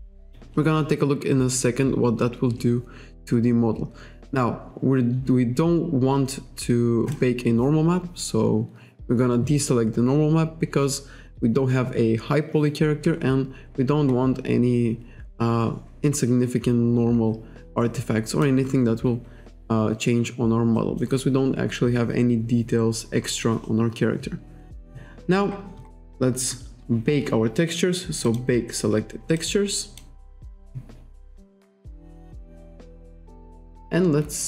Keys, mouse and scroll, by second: 7.1 click, 13.5-14.6 scroll up 1, 14.6-15.0 scroll up 1, 16.9-17.3 scroll down 1, 17.8 click, 20.8 click, 21.2-22.0 scroll up 1, 22.8-23.2 scroll down 1, 24.2-24.6 scroll down 1, 25.5 scroll up 1, 28.3 click, 29.4 click.